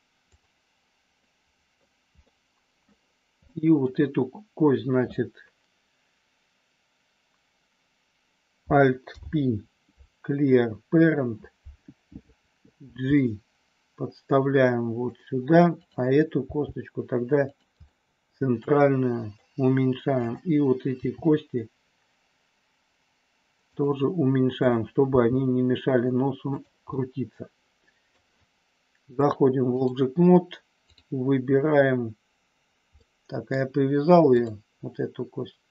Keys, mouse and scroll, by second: 0.3 click, 1.1 middle click, 2.2 middle click, 3.3 middle click, 9.1 alt+p, 12.8 g, 15.1 click, 16.5 g, 17.5 click, 17.8-19.3 middle drag, 21.0 g, 23.6 click, 25.1 g, 27.0-28.1 middle drag, 28.1 scroll down 1, 29.3 click, 33.0 middle click, 34.2 click.